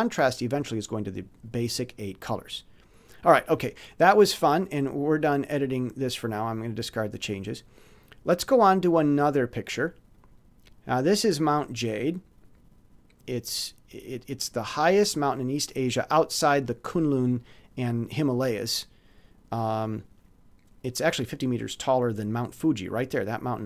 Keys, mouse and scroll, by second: 3.1 click, 5.0 click, 6.6 click, 7.6 click, 14.3 click.